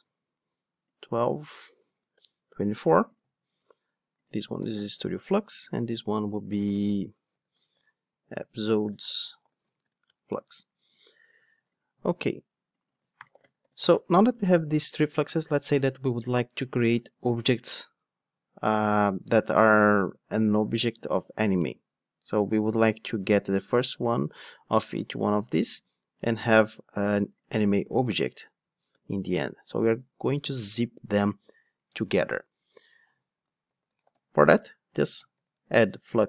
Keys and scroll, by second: 13.9 Return.